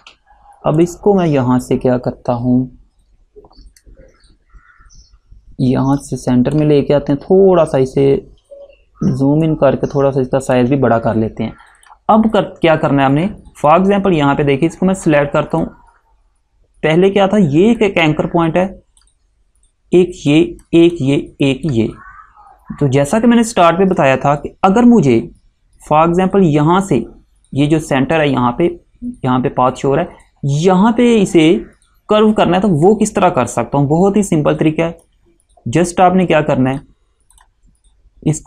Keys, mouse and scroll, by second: 0.9 click, 6.1 click, 7.6 scroll up 1, 9.5 shift+click, 11.9 click, 35.1 click.